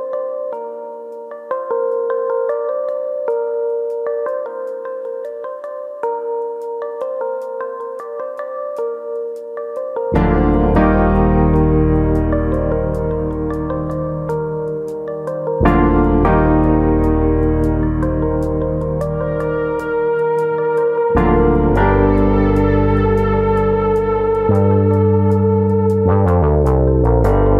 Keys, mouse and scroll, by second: 0.3 middle click, 1.4 click, 2.5 ctrl+click, 2.7 middle click, 3.9 middle click, 5.0 ctrl+click, 5.8 ctrl+e, 6.8 middle click, 6.8-7.5 scroll down 2, 12.6 click, 12.9 middle click, 13.3-14.5 scroll up 2, 13.5 middle click, 14.5 ctrl+click, 14.8 middle click, 15.6 ctrl+e, 16.3 middle click, 17.1 alt+click, 17.7 ctrl+e, 18.3-18.8 scroll down 4, 18.7 middle click, 19.0 scroll up 2, 19.3 middle click, 20.2 shift+middle click, 20.6 middle click, 21.9 middle click, 22.3 shift+middle click, 22.3-23.0 scroll up 3, 22.5 shift+middle click, 23.0 middle click, 23.8 click, 24.1 middle click, 25.5 ctrl+click.